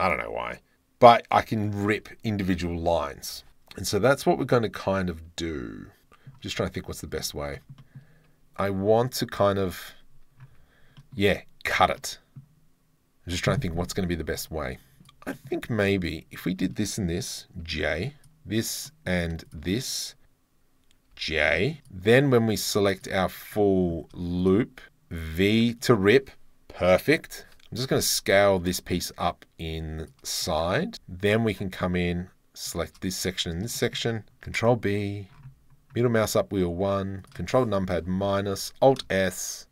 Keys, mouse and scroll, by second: 3.0-3.3 scroll, 3.3 2, 6.0 middle click, 7.3 shift+middle click, 7.6 shift+middle click, 7.8 middle click, 8.7 Tab, 10.5 2, 11.0 click, 12.0 click, 15.0 1, 15.3 click, 15.9 click, 16.1 shift+middle click, 17.6 j, 18.2 click, 18.9 click, 19.5 shift+click, 21.2 j, 21.4 click, 21.8 2, 22.9 alt+shift+click, 24.4 alt+shift+click, 25.3 v, 27.4 ctrl+l, 28.5 s, 30.0 shift+click, 31.2 alt+click, 32.7 alt+shift+click, 33.8 shift+middle click, 34.4 ctrl+b, 38.3 ctrl+KP_Subtract.